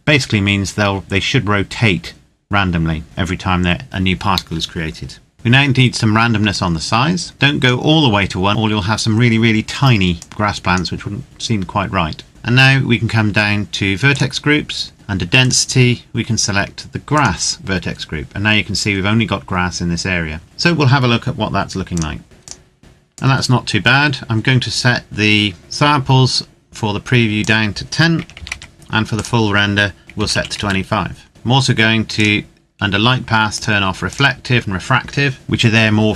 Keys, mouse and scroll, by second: 6.2 click, 9.9 click, 12.3-13.3 scroll down 1, 13.8 click, 20.4 click, 21.6 click, 22.6 click, 23.1 click, 26.2-27.2 scroll down 1, 27.2 click, 27.2 click, 28.0 KP_1, 28.2 KP_0, 28.4 KP_Enter, 29.0 click, 30.0 KP_2, 30.2 KP_5, 30.4 KP_Enter, 31.8 click, 32.4-33.2 scroll down 1, 33.2 click.